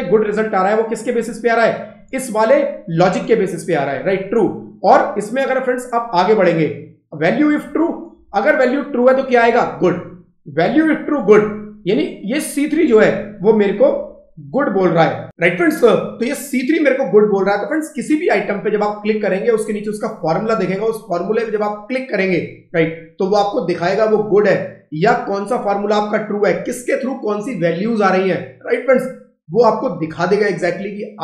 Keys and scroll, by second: 0.0 Escape, 1.1 F2.